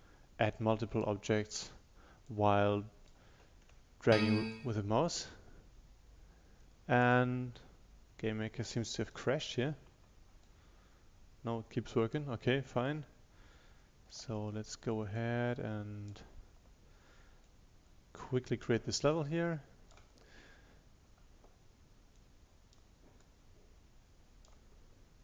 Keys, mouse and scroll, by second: 4.1 ctrl+shift+click, 10.5 ctrl+shift+click, 15.2-16.7 drag, 17.5 ctrl+shift+click.